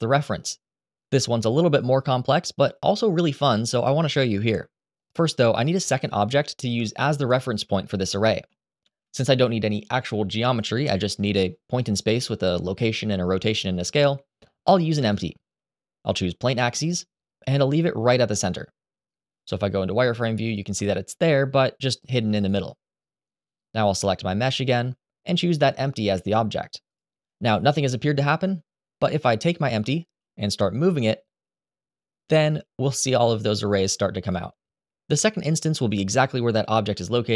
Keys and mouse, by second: 8.5 shift+a, 20.3 click, 23.6 click, 25.4-26.8 drag, 29.4 click, 30.5 g.